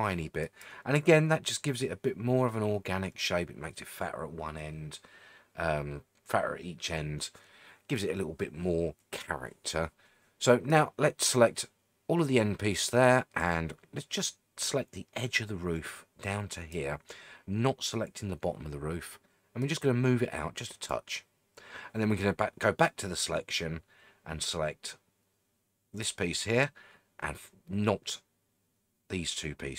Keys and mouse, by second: 0.4 click, 10.8-16.7 drag, 19.7-20.9 drag, 22.9-26.0 drag.